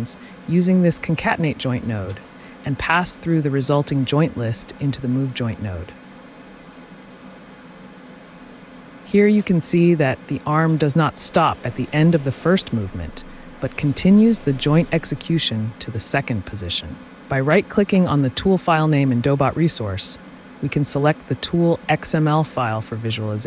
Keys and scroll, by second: 2.1 ctrl+d, 9.5 t.